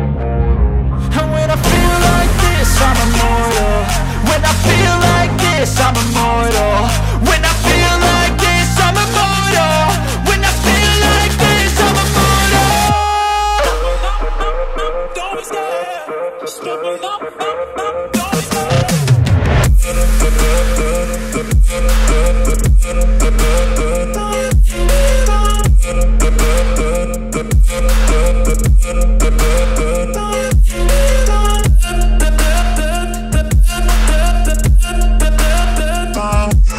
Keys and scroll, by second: 0.1 F4, 2.3 F2, 3.1 shift+F2, 7.8 shift+F2, 7.9 F3, 13.4 F3, 14.4 F2, 18.6 Escape, 19.8 F2, 23.2 shift+Page_Up, 29.2 space.